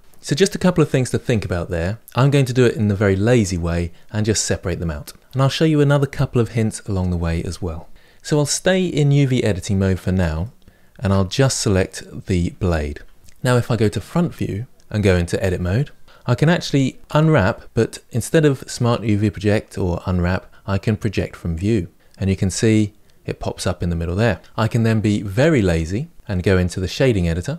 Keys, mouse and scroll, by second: 10.2-11.2 shift+middle drag, 11.2 Tab, 11.4 click, 14.0 KP_1, 15.2 Tab, 16.0-17.0 shift+middle drag, 17.0 u.